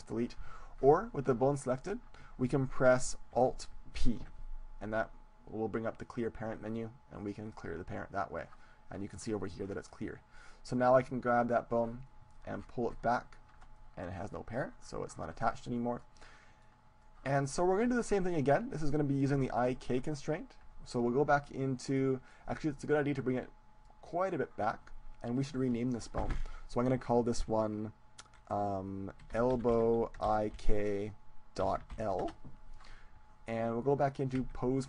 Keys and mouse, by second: 1.7-3.6 right drag, 4.0 alt+p, 10.4-12.6 right drag, 11.2-13.2 drag, 13.2-14.4 middle drag, 14.4-16.0 drag, 16.0 middle click, 16.8-18.4 drag, 18.4-21.2 middle drag, 22.0-23.2 middle drag, 23.2-27.2 drag, 34.6 Tab.